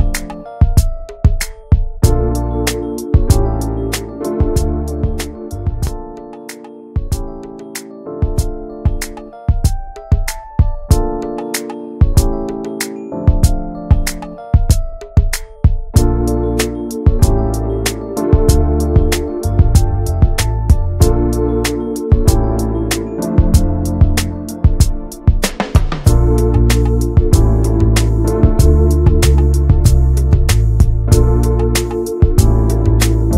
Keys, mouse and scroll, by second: 1.2 click, 1.9 middle click, 2.4 click, 2.7 middle click, 3.2-3.5 scroll down 2, 3.5 Tab, 3.8 click, 4.5 ctrl+a, 4.7 Tab, 5.9-7.0 right drag, 7.0 middle click, 7.2-7.9 scroll up 1, 8.3 3, 8.9 click, 9.2 middle click, 9.8 2, 10.6 click, 10.7-11.5 scroll up 1, 11.9-12.9 alt+shift+drag, 12.9 scroll down 4, 13.1 middle click, 13.5-13.9 scroll up 3, 14.1-15.7 shift+middle drag, 15.7 alt+shift+click, 16.2 alt+shift+click, 16.4 scroll down 1, 16.6 middle click, 17.2-18.2 scroll up 6, 18.5 shift+middle click, 19.0 alt+shift+click, 19.5 alt+shift+click, 20.1-24.2 right drag, 24.2 a, 24.5 right click, 25.2 scroll down 7, 25.5-26.8 middle drag, 26.8 scroll down 2, 27.1 shift+middle click, 27.6 ctrl+s, 27.9 Tab, 28.0 scroll down 2, 28.2 middle click, 28.6 ctrl+s, 28.9 click, 29.4 /, 30.3 click, 30.6 middle click, 31.2 scroll up 2, 31.6 shift+middle click, 32.4 /, 32.8 middle click, 33.2 Tab.